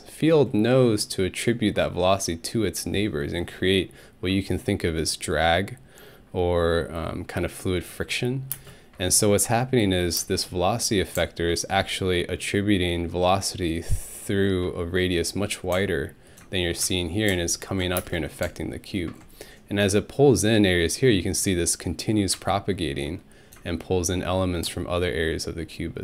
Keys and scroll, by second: 8.5 space, 10.2 space, 18.0 ctrl+alt+space.